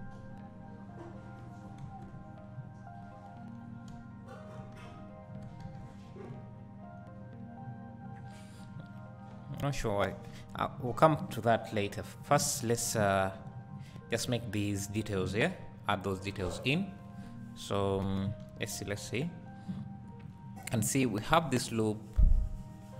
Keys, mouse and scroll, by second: 1.8 alt+a, 4.9 Tab, 5.7 ctrl+s, 6.4-16.2 drag, 10.3 scroll up 1, 13.4-15.3 scroll, 15.6-16.0 scroll down 3, 16.6 click, 18.5 Tab, 19.3-20.4 scroll up 2.